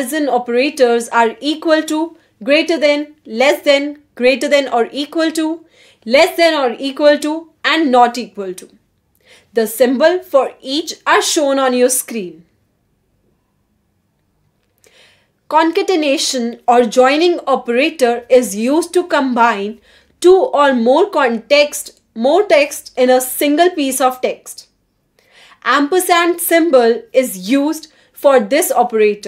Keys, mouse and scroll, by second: 1.5 click, 15.2 click, 16.1 click, 16.6 click, 16.8-19.9 typing, 20.4 Tab, 20.5 Tab, 21.6 =, 22.0 shift+a, 24.3 shift+7, 25.4 shift+', 25.6 shift+space, 26.7-28.5 typing.